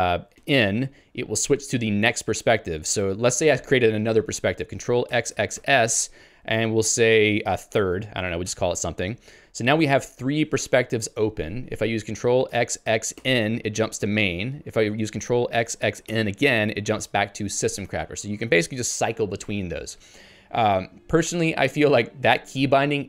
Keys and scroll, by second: 7.3-8.5 typing, 8.6 Return.